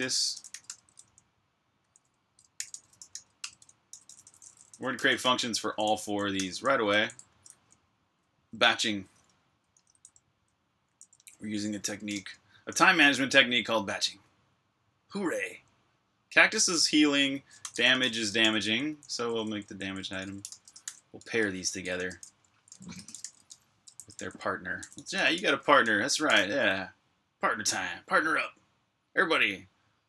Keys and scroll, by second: 8.1-12.3 typing, 17.1-23.4 typing, 27.9-28.6 typing.